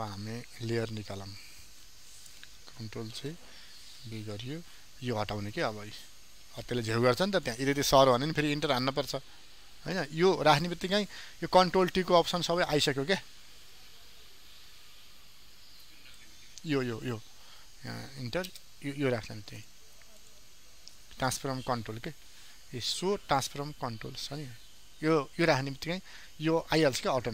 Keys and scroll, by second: 2.3 ctrl+j.